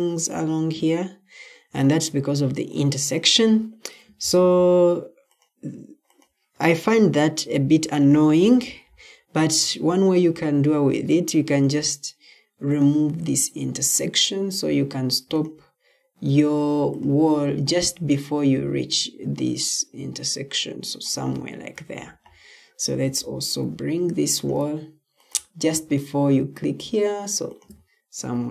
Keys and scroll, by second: 21.7 Escape, 28.2 Escape.